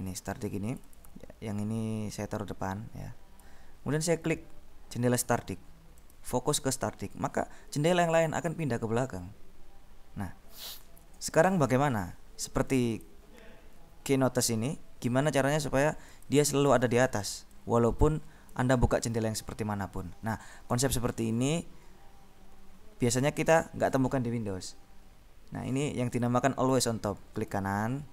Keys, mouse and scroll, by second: 1.4 click, 2.4-4.1 drag, 6.5 click, 13.3 click, 16.3 click, 17.8-19.1 drag, 26.3-27.4 drag, 27.7 right click.